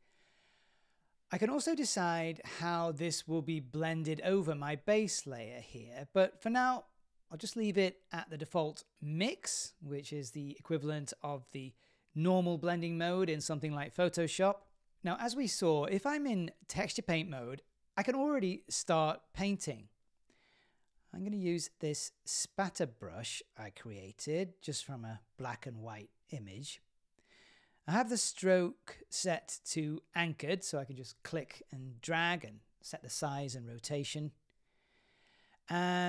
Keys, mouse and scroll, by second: 0.0-14.6 drag, 16.3 click, 19.3 click, 20.1 shift+f, 20.7 click, 21.6 middle click, 23.3 super+z, 23.5 super+z, 23.7 super+z, 24.6 middle click, 25.6 click, 26.9-28.5 right drag, 32.7 click, 34.6 super+z.